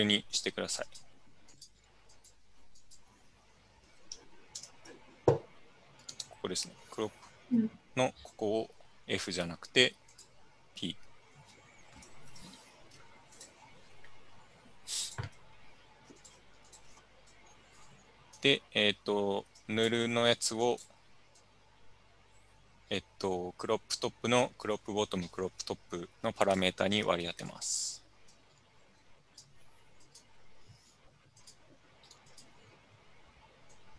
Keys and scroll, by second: 5.3 super+=, 12.3 super+Escape.